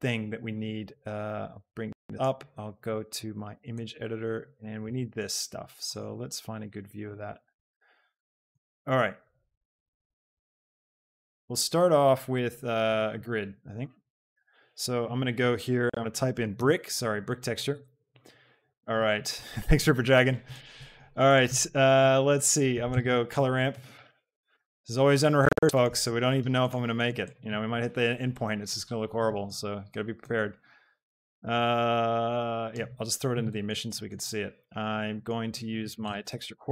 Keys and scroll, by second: 14.5 shift+a, 16.7 i, 17.8 Return, 22.9 a, 23.3 c, 23.6 l, 24.0 r, 24.4 Down, 24.7 Return, 36.5 x.